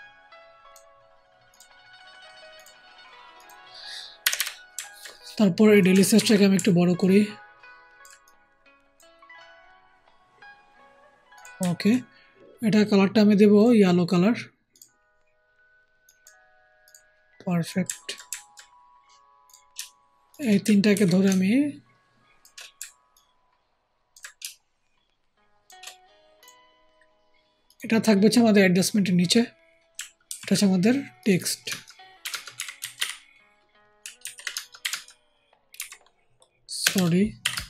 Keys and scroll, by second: 6.1 ctrl+t, 20.8 ctrl+shift+t, 30.2 ctrl+g, 32.1 t, 32.5 e, 32.7 x, 32.9 t, 34.1 ctrl+a, 34.7 t, 35.7 e, 36.7 BackSpace, 36.8 BackSpace, 37.3 t.